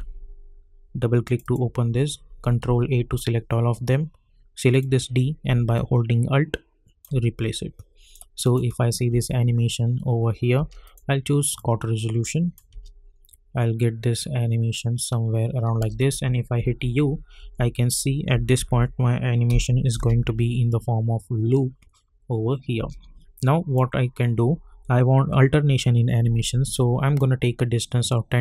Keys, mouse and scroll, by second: 2.6 ctrl+a, 4.7 click, 5.7-8.4 alt+drag, 9.1 space, 10.8 click, 12.7 space, 15.7-19.9 typing, 15.9 click, 22.7 space, 23.4-26.1 drag, 26.7-28.4 drag.